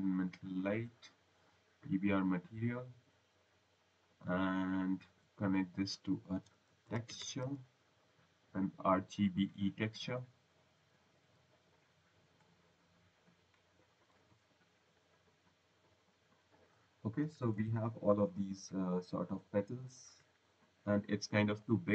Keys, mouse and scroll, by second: 1.9 click, 4.6 click, 6.3-8.2 typing, 8.8 click, 11.0 click, 13.1 click, 21.5 click.